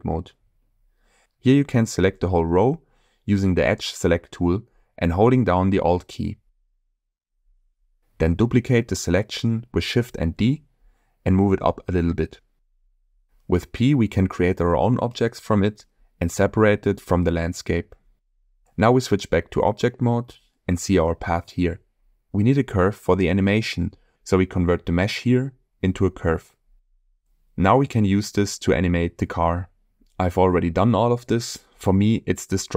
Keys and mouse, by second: 2.2 Tab, 6.8 alt+click, 11.2 shift+d, 12.1 z, 12.5 1, 18.4 click, 18.7 click, 22.0-23.8 shift+middle drag, 24.6-26.6 drag, 31.8 Delete.